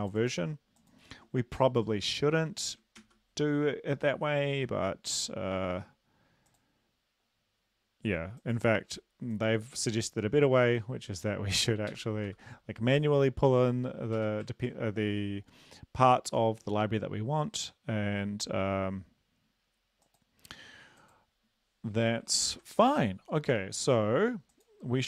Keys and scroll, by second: 2.4 Left, 3.0 ctrl+s, 11.9 shift+Home, 12.3 ctrl+v, 14.2 BackSpace, 14.5 ctrl+s, 22.4 ctrl+`.